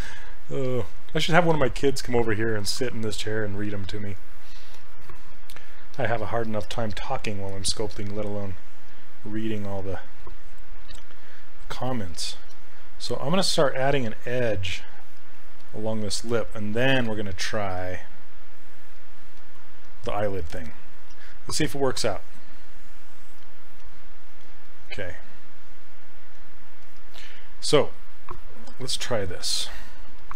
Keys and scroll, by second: 7.1 s.